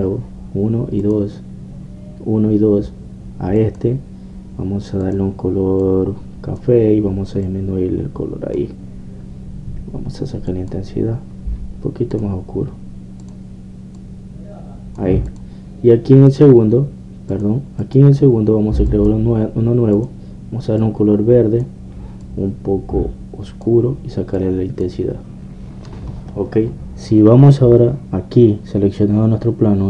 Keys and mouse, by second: 2.1-4.0 drag, 4.0 middle click, 4.6-8.3 drag, 8.3 middle click, 11.5-18.8 drag, 17.3-18.8 right drag, 18.8 middle click, 19.1-23.3 drag, 25.4-27.3 drag, 27.3-29.8 middle drag.